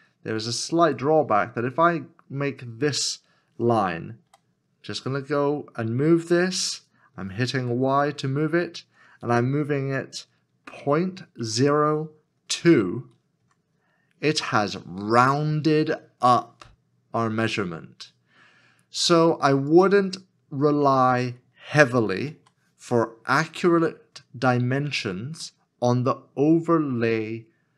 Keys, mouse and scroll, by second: 0.5 shift+click, 0.5 shift+click, 4.3 g, 7.6 y, 10.8 y, 11.4 KP_Decimal, 13.4 2, 21.6 2, 22.1 ctrl+z, 24.8 scroll down 1.